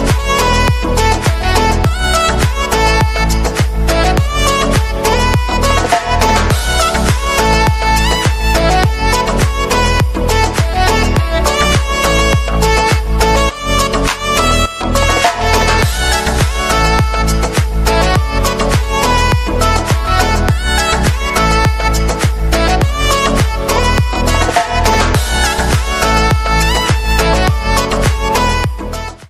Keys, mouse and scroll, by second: 13.2 right click.